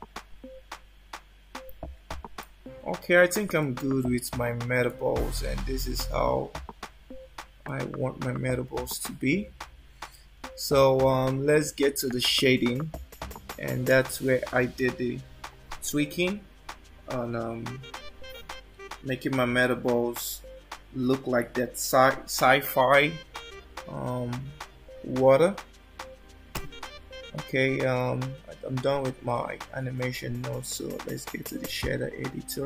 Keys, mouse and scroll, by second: 3.7 shift+middle click, 7.7 click, 13.4 click, 26.6 click.